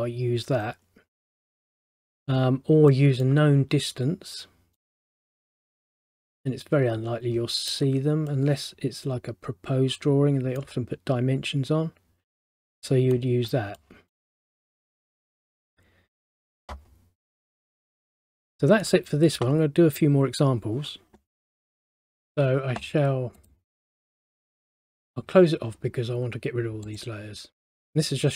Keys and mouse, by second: 1.5 middle click, 4.9 middle click, 8.4 middle click, 12.8 middle click, 18.5 middle click, 22.3 click, 23.5 click, 27.0 click.